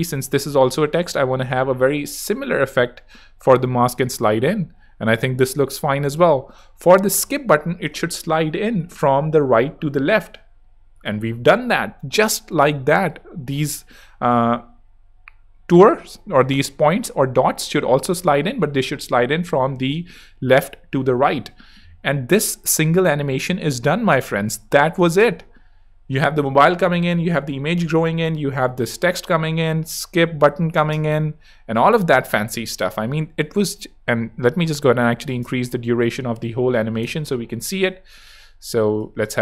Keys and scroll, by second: 25.1 space, 30.7 space, 36.5-37.6 typing.